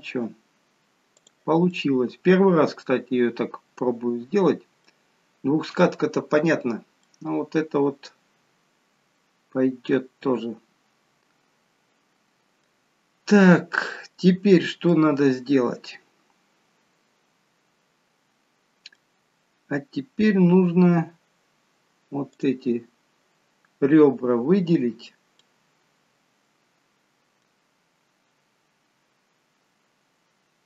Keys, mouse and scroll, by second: 1.4 click, 1.7 middle click, 5.4-5.8 scroll up 1, 7.0 middle click, 7.0 scroll up 1, 14.8 middle click, 22.3 click, 25.4 middle click.